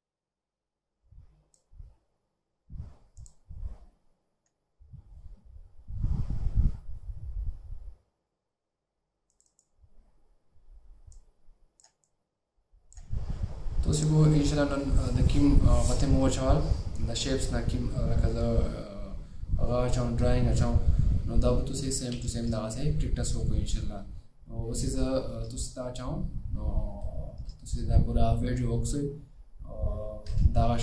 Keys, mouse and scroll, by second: 9.6 double click.